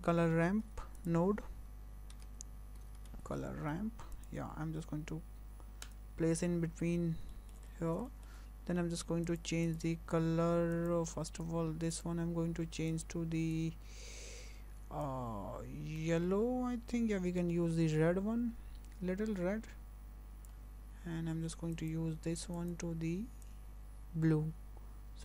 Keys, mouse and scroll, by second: 0.7 shift+a, 6.9 scroll up 4, 7.3 shift+middle click, 7.7 scroll up 2, 8.1 shift+middle click, 9.3 click, 9.6 click, 10.7 click, 11.3 click, 11.9 click, 21.8 click, 22.6 click.